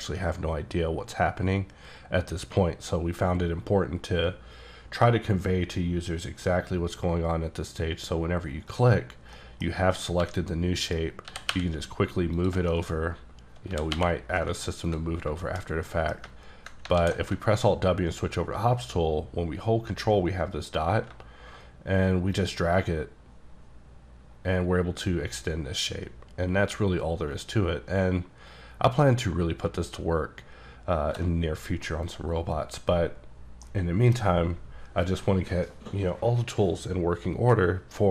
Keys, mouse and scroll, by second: 8.7 click, 9.4 middle click, 9.8-10.2 scroll down 2, 10.2 g, 10.8 right click, 11.3 g, 11.5 y, 12.4 click, 12.6 shift+click, 12.7 shift+middle click, 12.9 middle click, 13.0-13.7 scroll up 4, 13.7 g, 14.0 y, 14.9 ctrl+click, 15.2-15.8 scroll down 4, 15.5 shift+middle click, 15.9 middle click, 17.0 alt+w, 22.7-24.3 ctrl+shift+drag, 24.6-27.1 ctrl+drag, 28.6-29.6 ctrl+drag, 31.9 middle click, 32.2 scroll down 1, 32.4-33.2 scroll up 1, 33.2 scroll down 2, 33.7 middle click.